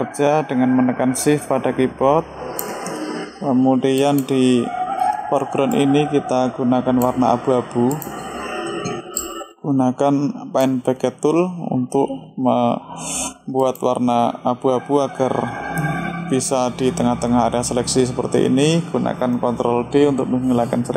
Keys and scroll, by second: 19.0 ctrl+d.